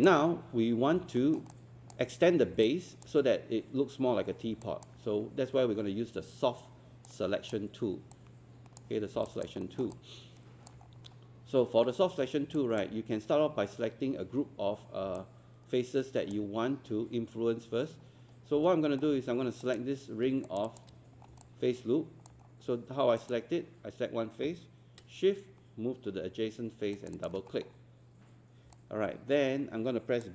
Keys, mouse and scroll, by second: 9.3 alt+click, 9.9 alt+click, 10.9 scroll up 1, 12.6 alt+click, 15.2 alt+click, 18.1 scroll up 1, 18.7 alt+middle click, 19.6 click, 20.5 shift+click, 21.2 scroll down 1, 21.5 alt+click, 22.5-23.2 scroll up 1, 23.2 click, 26.9 shift+click, 27.5 scroll down 1, 28.7 alt+click.